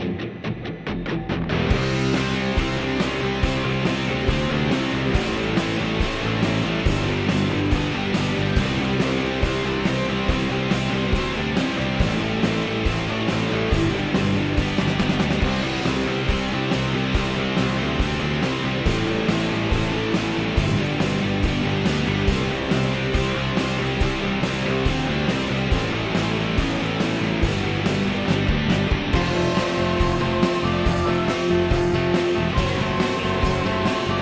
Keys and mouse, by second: 2.7-3.2 drag, 2.7-3.2 right drag, 4.4 shift+click, 4.9-5.9 shift+drag, 6.4 Tab, 6.9 2, 7.1 click, 7.9 ctrl+b, 14.1-17.0 drag, 15.4-17.0 middle drag, 17.5-18.3 drag, 17.5-18.3 middle drag, 17.5-18.3 right drag, 19.7 Tab, 20.0-20.7 middle drag, 21.1-21.6 middle drag, 22.1-23.3 drag, 23.8 shift+middle click, 24.1-25.1 middle drag, 25.3 shift+middle click, 28.1-29.6 middle drag, 29.8 shift+middle click, 31.7 ctrl+a.